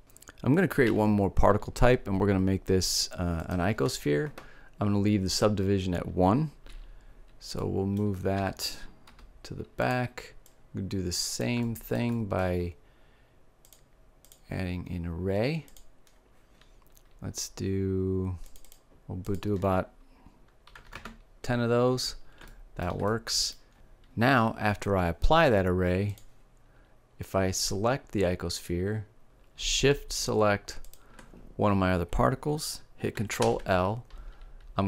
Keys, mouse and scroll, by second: 0.9 shift+a, 7.6-9.7 middle drag, 8.4 g, 10.0-12.4 drag, 13.7-18.3 drag, 18.5-21.1 drag, 22.5-23.7 middle drag, 25.8-27.8 drag, 27.8-29.0 middle drag, 30.7-32.6 drag, 33.3 ctrl+l.